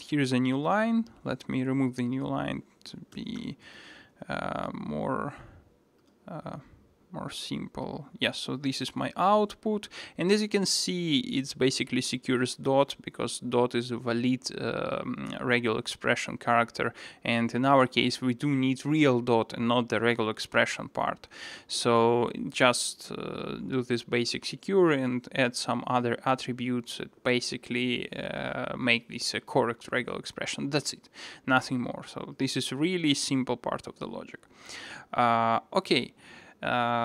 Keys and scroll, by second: 3.9 super+s, 6.2 ctrl+shift+r, 33.2 alt+super+[.